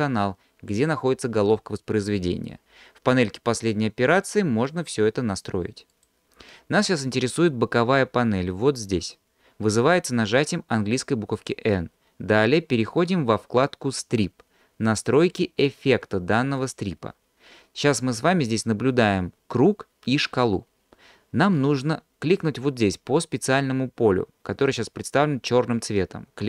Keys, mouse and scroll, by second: 4.1 click, 5.9 click, 12.8-13.4 drag, 14.9 click, 16.6 click.